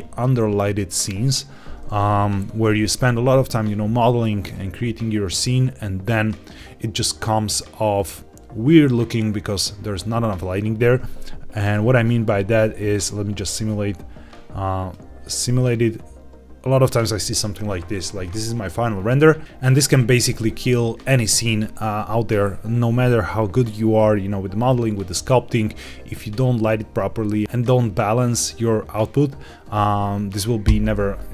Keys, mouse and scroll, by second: 11.5 click, 11.9-13.3 scroll down 4, 13.3 click, 13.3-13.8 scroll down 2, 14.8-16.8 drag.